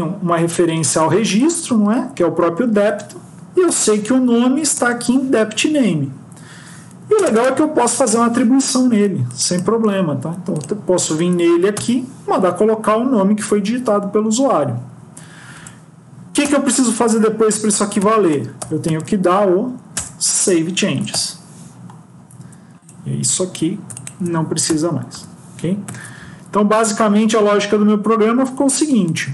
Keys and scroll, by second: 0.7 ctrl+c, 1.6 ctrl+v, 4.6 Return, 9.8 ctrl+c, 11.2 ctrl+v, 19.8 Return, 24.6 BackSpace, 25.7 ctrl+s.